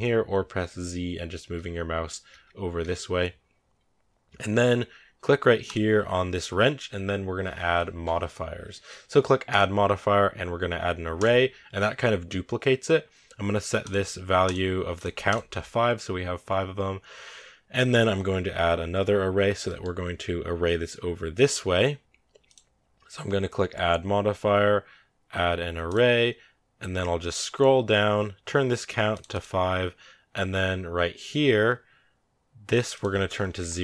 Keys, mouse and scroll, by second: 1.5 z, 2.3 z, 2.7 z, 11.1-11.7 drag, 11.7 scroll down 3, 11.8 scroll up 2, 13.7 click, 15.6 scroll down 3, 16.4 scroll up 1, 16.4 scroll down 1, 19.5-25.8 middle drag, 25.8 click, 29.0-33.8 drag.